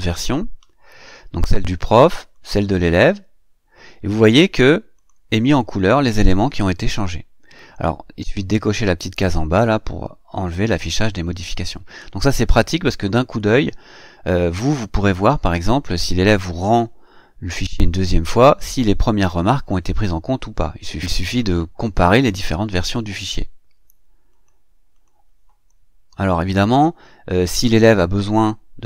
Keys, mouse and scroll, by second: 2.1 click, 4.8 click, 24.1 click, 24.7 click.